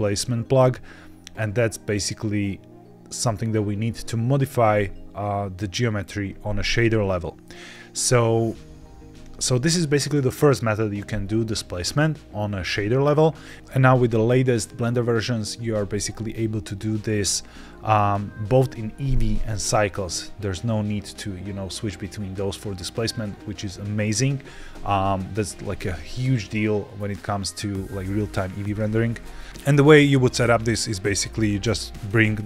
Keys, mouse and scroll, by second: 6.5-6.9 scroll down 2, 6.9 middle click, 29.5 click, 31.2 shift+a.